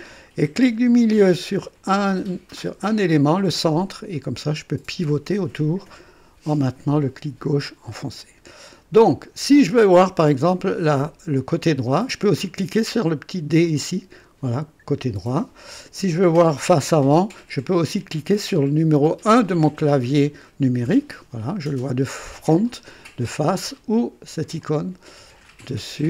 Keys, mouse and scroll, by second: 2.8 middle click, 3.6-9.3 drag, 10.2-11.0 drag, 13.6 click, 20.8 KP_1, 24.6 click, 25.6 click.